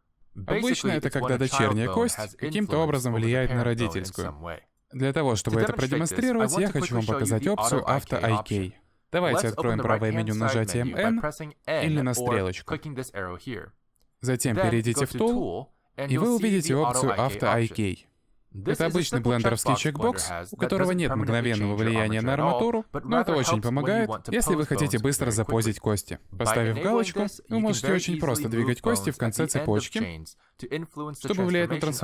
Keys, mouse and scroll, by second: 6.1 scroll down 1, 6.3 middle click, 7.3 shift+middle click, 11.1 click, 16.4 click, 18.9 click, 28.9 middle click, 29.6 g.